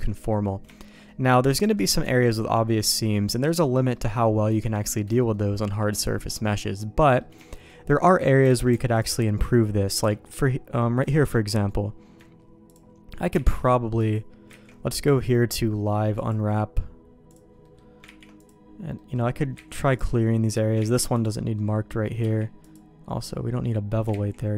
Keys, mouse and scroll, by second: 0.3 middle click, 0.7 shift+middle click, 1.1 middle click, 1.6 shift+middle click, 2.0 Tab, 2.4 middle click, 3.9 middle click, 4.6 Tab, 5.2 middle click, 5.7 middle click, 6.3 middle click, 7.0 middle click, 7.5 shift+middle click, 8.6 alt+a, 8.9 alt+click, 9.3 middle click, 10.0 KP_Decimal, 11.0 click, 11.3 middle click, 13.4 ctrl+e, 14.6 ctrl+z, 16.2-17.5 drag, 17.6 middle click, 18.2 ctrl+e, 19.0 middle click, 19.7 ctrl+z, 19.9 click, 21.0 ctrl+e, 21.6 middle click, 22.2 q, 24.3 ctrl+z.